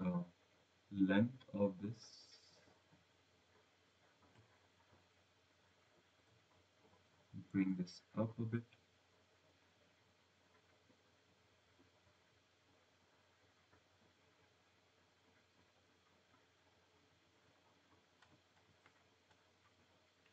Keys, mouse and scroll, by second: 0.1 scroll, 1.0 click, 4.5 click, 7.3 click, 8.4 click, 12.3-12.6 scroll, 16.2 click.